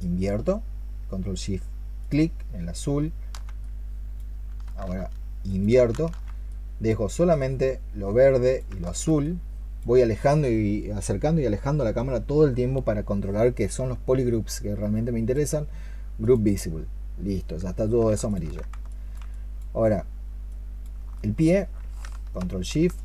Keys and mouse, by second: 1.9 ctrl+shift+click, 5.3 ctrl+shift+click, 8.7 alt+click, 9.1 alt+click, 18.1 ctrl+shift+click, 20.9 alt+click, 21.0 alt+click, 22.8 ctrl+shift+click.